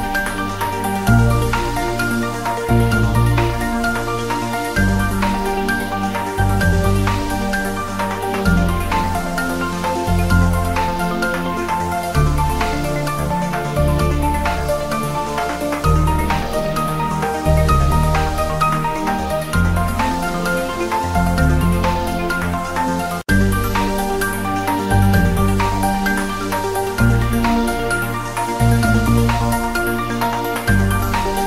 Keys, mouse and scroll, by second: 0.6 g, 1.0 click, 1.7 s, 2.5 click, 2.8 Tab, 2.9-3.8 scroll up 2, 3.2 ctrl+r, 3.8 click, 5.7 g, 6.7 click, 6.9 s, 8.9 click, 10.2 scroll down 1, 10.5 s, 10.9 y, 11.5 click, 12.1 g, 13.7 click, 14.9 g, 16.0 click, 16.6 g, 16.9 click, 18.1-18.4 scroll up 1, 19.1 1, 19.6 click, 20.2 ctrl+b, 20.5 click, 20.7 ctrl+z, 21.3 a, 21.7 alt+e, 22.0 click, 23.0 s, 24.2 click, 25.1-25.7 scroll down 1, 25.8-27.8 drag, 28.0 click, 28.2-28.6 scroll up 1, 28.7 3, 28.9 scroll up 1, 29.3 click, 30.1 g, 31.1 click, 31.2 ctrl+z.